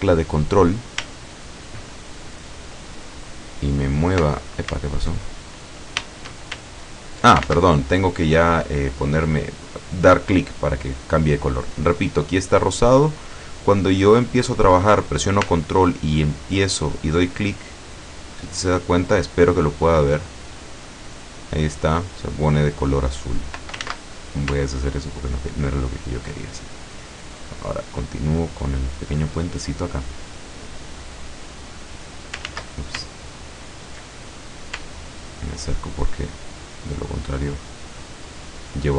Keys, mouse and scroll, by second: 6.8 ctrl+click, 7.5 ctrl+z, 17.3-23.5 ctrl+drag, 23.9 ctrl+z, 24.7-26.2 ctrl+drag, 26.3 ctrl+click, 27.1 ctrl+click, 27.8 ctrl+click, 28.5 ctrl+click, 29.5 ctrl+scroll down 3, 29.8-31.1 middle drag, 31.6 click, 32.5 ctrl+z, 33.2 ctrl+click, 34.4-34.7 ctrl+scroll up 3, 35.4 ctrl+click, 36.4 ctrl+click, 37.2 ctrl+click, 38.2 ctrl+click.